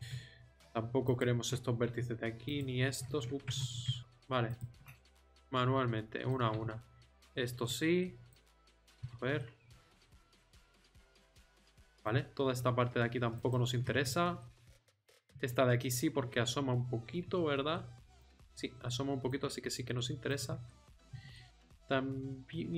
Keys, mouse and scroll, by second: 3.6 ctrl+z, 4.0 click, 5.3-6.4 middle drag, 9.0 z, 9.6 click, 10.2 z, 11.2 middle click, 14.9-16.3 middle drag, 17.2 z, 19.4 z, 20.2 middle click.